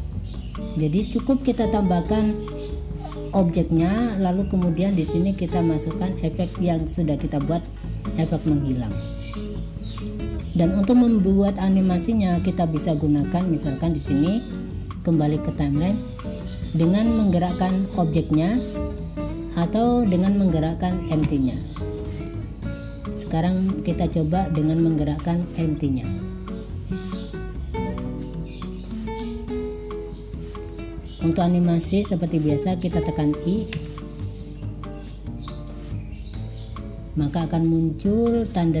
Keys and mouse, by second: 5.0 click, 10.0 click, 13.3 click, 14.5-16.5 drag, 18.6-20.1 drag, 22.3 click, 25.3-27.4 drag, 33.8 i.